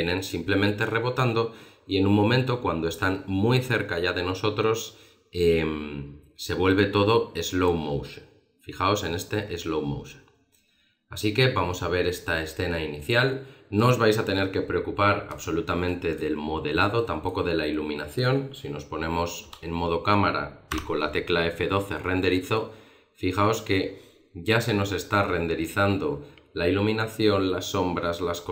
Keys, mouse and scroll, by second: 15.7 middle click, 16.9 middle click, 18.0 middle click, 19.4 KP_0.